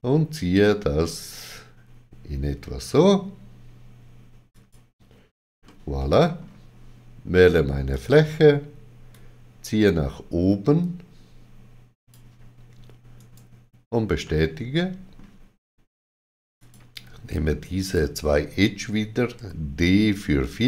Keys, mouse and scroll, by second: 4.5 click, 5.6 middle click, 7.9 click, 9.1 click, 13.2 right click, 14.2 middle click, 16.6 click, 17.8 shift+click, 19.4 d.